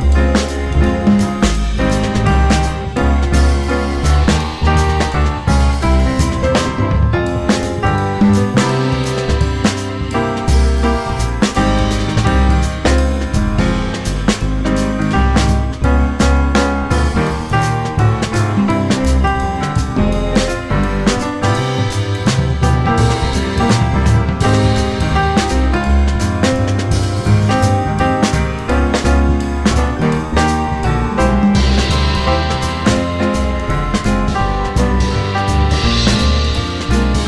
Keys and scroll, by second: 0.3 alt+c, 8.1 1, 9.2 F4, 9.8 F4, 12.0 2, 12.1 F4, 14.6 ctrl+r, 15.5 ctrl+c, 16.5 2, 17.1 F4, 18.4 F4, 20.3 2, 20.3 F4, 21.7 ctrl+r, 21.8 ctrl+c, 24.6 2, 25.3 F4, 26.5 F4, 27.8 F4.